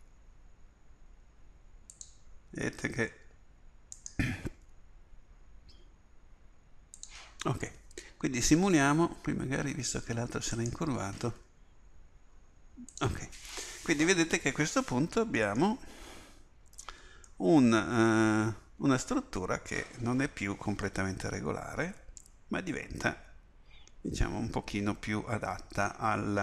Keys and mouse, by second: 0.0 g, 4.7 g, 10.5-13.0 drag, 11.4 g, 14.8-16.8 drag, 16.8 Tab.